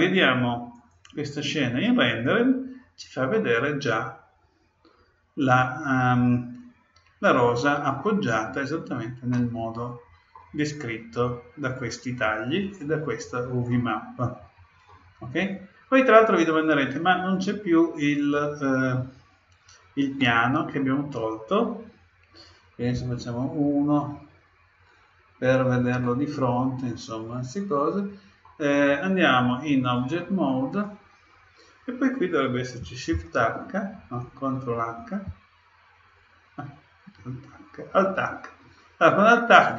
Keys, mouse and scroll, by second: 0.7-2.5 drag, 3.3-5.2 middle drag, 9.3-11.1 middle drag, 13.7-15.5 middle drag, 24.9-27.9 middle drag, 29.8-31.6 drag, 33.1 shift+h, 35.2 ctrl+h, 37.2 alt+h.